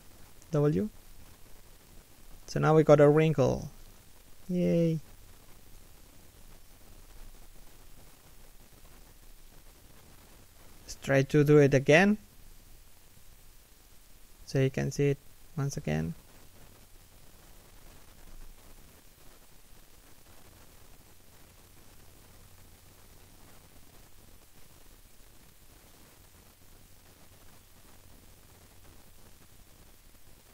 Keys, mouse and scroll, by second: 0.1 middle click, 2.9 3, 3.4 1, 4.4 shift+middle click, 5.6 a, 7.1 scroll up 1, 7.7 middle click, 8.5 3, 9.1 1, 10.0 z, 10.7 alt+right click, 11.0 scroll down 1, 11.3 alt+shift+middle click, 12.0 e, 12.6 r, 13.9 e, 15.6-21.9 typing, 21.0 alt+right click, 23.1 alt+right click, 23.2 g, 24.5 scroll up 1, 25.4-28.1 typing, 27.9 alt+right click, 29.1 alt+right click, 29.2 g, 30.4 alt+right click.